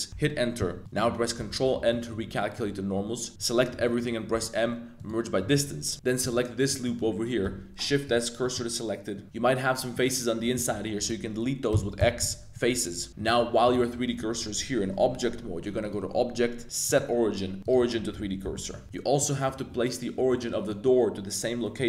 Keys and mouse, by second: 0.1 Return, 0.8 click, 0.8 z, 1.3 super+n, 1.9 shift+click, 2.3 click, 2.3 z, 2.9 a, 3.3 a, 3.8 shift+click, 4.3 m, 5.5 a, 6.2 b, 6.8 click, 7.4 shift+s, 8.4 click, 9.2 f, 9.9 click, 10.5 x, 12.2 x, 13.1 b, 13.2 shift+s, 14.8 Tab, 15.9-17.7 drag, 18.5 middle click, 19.2 click, 20.3-20.7 middle drag, 21.6 middle click.